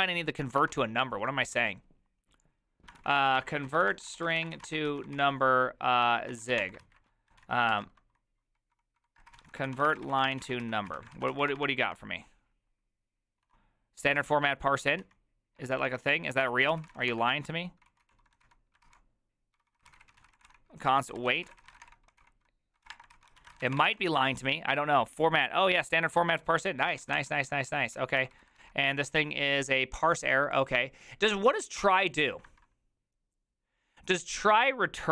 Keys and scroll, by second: 0.0-0.2 typing, 0.6 alt++, 3.0 ctrl+t, 3.0-24.1 typing, 16.4 Tab, 16.7 ctrl+c, 26.2-29.0 typing, 26.2 alt+{, 26.9 ctrl+c, 27.0 ctrl+:, 27.2 Return.